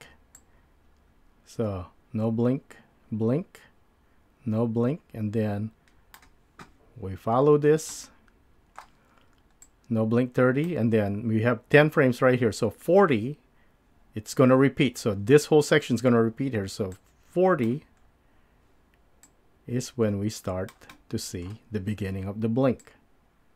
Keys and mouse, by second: 0.4-6.2 drag, 7.9-8.8 middle drag, 9.7-10.6 drag.